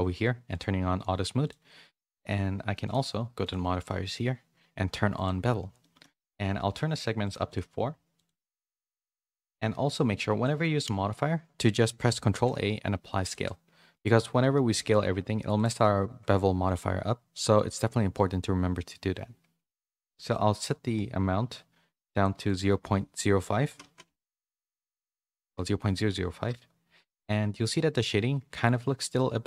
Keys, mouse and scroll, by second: 0.5 click, 1.4-5.3 drag, 5.8 shift+middle click, 8.2 click, 9.4 click, 12.3 ctrl+a, 14.0-15.3 drag, 15.5 click, 20.4-22.3 shift+drag, 22.4-26.4 drag, 27.3 middle click, 28.2 middle click.